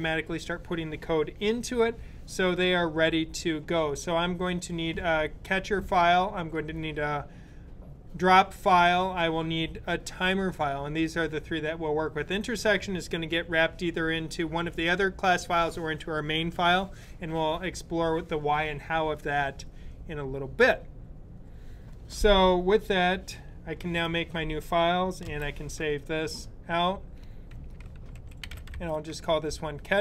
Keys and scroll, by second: 23.6 super+n, 24.9 super+s, 27.1-29.0 typing.